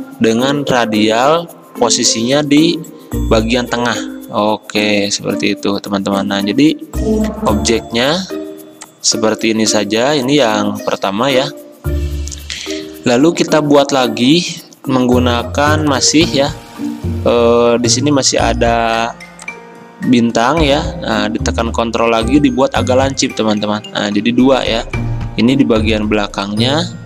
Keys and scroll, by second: 24.2 v, 25.3 ctrl+z.